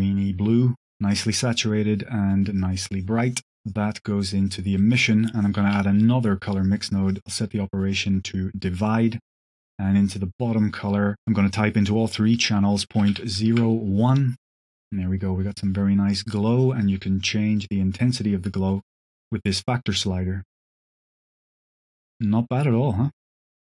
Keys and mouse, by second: 1.7-2.1 drag, 3.0 click, 3.6 click, 4.7 middle drag, 5.2 click, 5.6 shift+d, 6.6 click, 7.0-8.8 drag, 9.5-10.4 drag, 14.2 click, 16.7-21.2 drag, 21.8 space, 23.2 space.